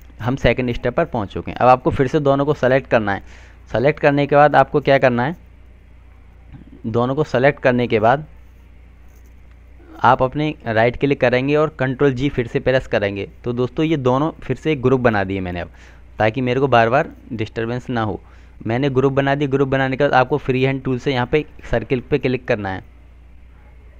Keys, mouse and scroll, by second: 2.5 click, 11.1 right click, 14.9 click.